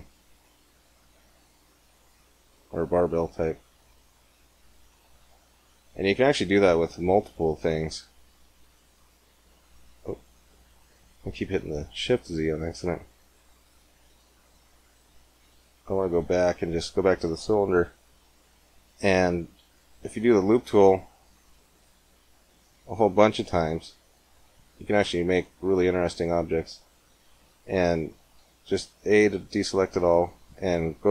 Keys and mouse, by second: 5.1 Tab, 8.0 shift+z, 9.2 shift+z, 10.5 ctrl+z, 12.7-14.5 middle drag, 13.7 ctrl+z, 15.3 ctrl+z, 15.7 ctrl+z, 19.9 ctrl+r, 28.3 a, 29.6-31.1 drag.